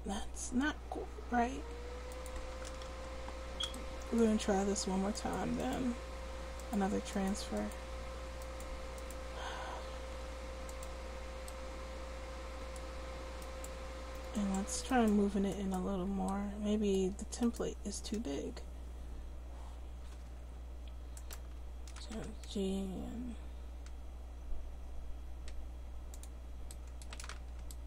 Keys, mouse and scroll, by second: 2.5 a, 2.9 alt+r, 5.1-12.1 drag, 20.2 Tab, 22.1 g.